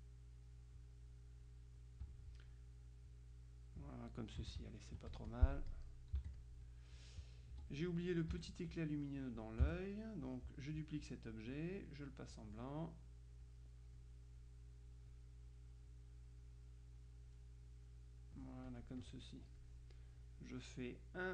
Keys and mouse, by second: 1.6-2.6 drag, 3.4 click, 4.6 KP_Subtract, 5.2-7.0 drag, 6.3 z, 7.6 F2, 7.8 click, 8.4 F1, 9.5-11.2 drag, 9.7 space, 12.4 click, 13.6-15.5 drag, 16.5-17.5 drag, 18.8 click, 19.7-21.3 drag.